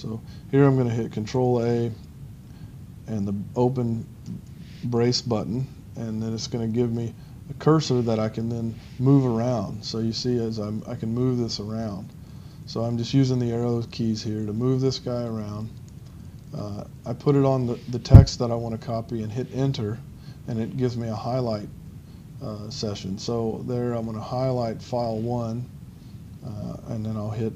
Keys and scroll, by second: 4.6-5.0 typing, 8.4 Up, 10.8 Down, 12.2 Left, 12.7 Up, 13.2 Left, 13.8 Down, 14.2 Left, 19.3 Return, 20.1 Right, 23.4 Left, 24.1 Right.